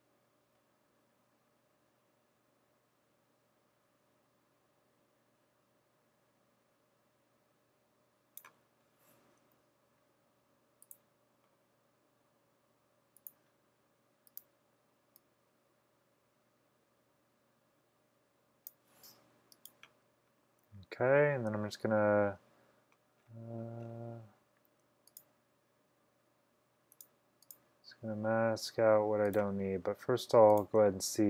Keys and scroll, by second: 9.6 [, 9.9 [.